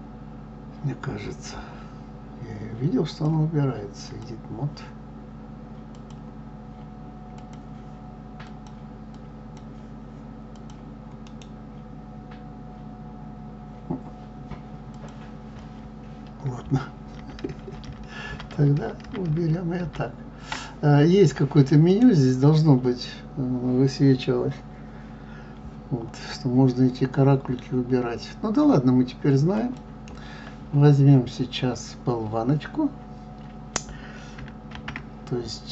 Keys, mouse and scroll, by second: 14.8-17.2 drag, 17.2-18.7 ctrl+z, 29.5-35.7 drag.